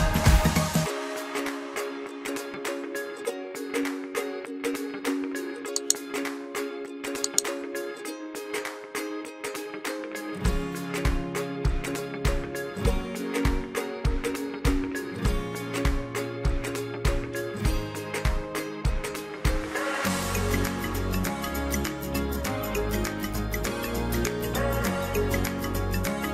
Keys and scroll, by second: 15.7 ctrl+t, 17.5 ctrl+t.